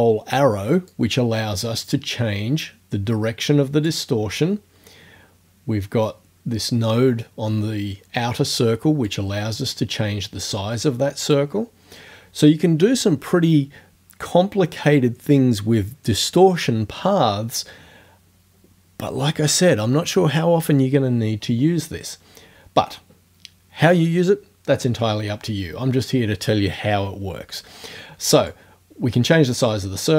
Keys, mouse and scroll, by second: 0.9-4.1 drag, 9.1-11.5 drag, 28.5-30.1 drag.